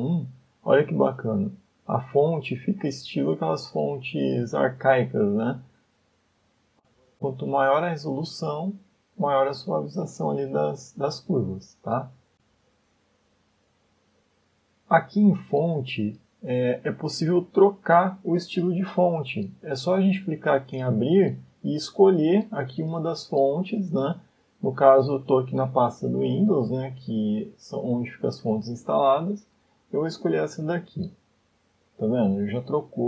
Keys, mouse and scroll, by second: 0.1 click, 0.8 middle click, 1.3-1.9 scroll up 3, 2.2 middle click, 5.9 click, 6.2 click, 6.4 click, 6.7 click, 7.0 click, 10.3-11.1 click, 10.5 click, 12.8 scroll down 2, 13.3 shift+middle click, 17.0 click, 20.8 click, 22.8 click, 32.5 middle click.